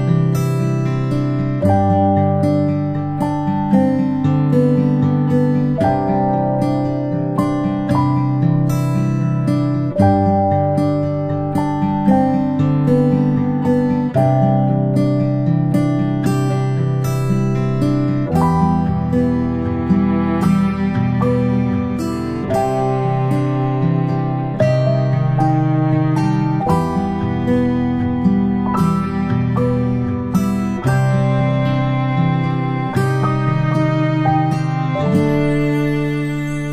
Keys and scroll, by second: 0.3 y, 3.0-3.4 space, 9.3 ctrl+shift+[, 9.7 ctrl+], 14.8-15.7 space, 15.7 ctrl+space, 15.8 ctrl+space.